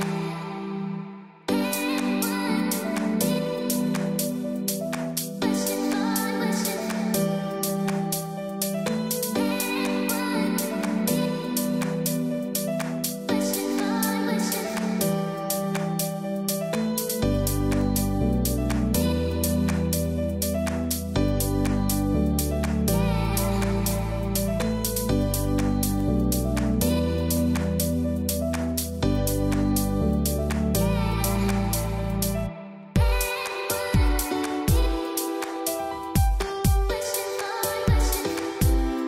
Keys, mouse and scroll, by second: 0.0-5.7 typing, 0.5 click, 1.3 click, 1.5 click, 2.0 click, 2.5 click, 3.2 click, 4.0 click, 4.7 click, 5.8 click, 6.8-12.3 typing, 6.9 click, 7.4 click, 8.0 click, 9.6 click, 12.5 click, 13.5 space, 13.7 click, 14.0 space, 14.2 click, 15.5 z, 16.7 click, 20.5 space, 20.6 click, 22.4 space, 22.6 click, 22.9 space, 25.0 click, 31.2 click, 31.6 z, 31.9 click, 32.7-39.0 typing, 32.9 click, 34.9 click, 37.6 click, 38.3 click, 38.5 click.